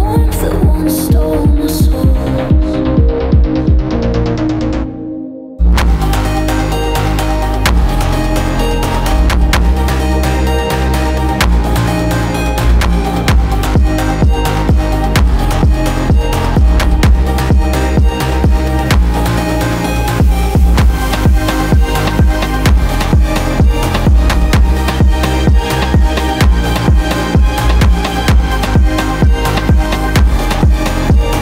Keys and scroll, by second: 2.2 ctrl+z, 3.8 ctrl+z, 6.1 space, 8.0 space, 8.9 space, 10.8-11.9 typing, 15.8 alt+Right, 17.4 ctrl+z, 23.1 ctrl+z, 26.6 i.